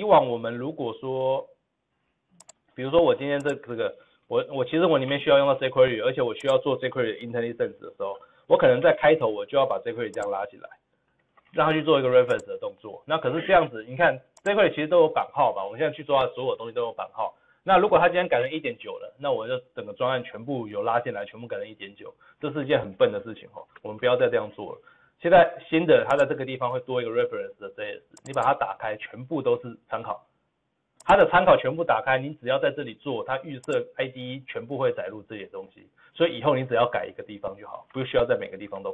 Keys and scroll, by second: 2.5 ctrl+v.